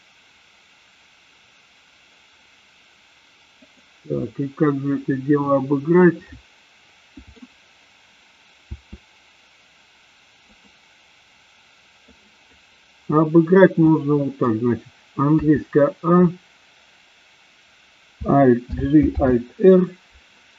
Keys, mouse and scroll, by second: 6.1-7.4 middle drag, 8.7 r, 12.0 click, 13.9 middle click, 15.5 a, 18.7 alt+g, 19.2 alt+r.